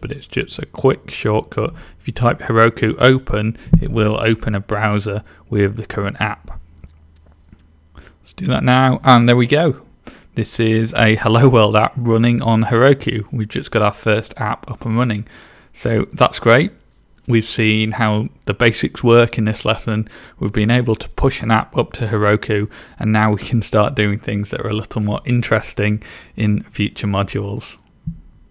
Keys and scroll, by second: 0.0-2.1 typing.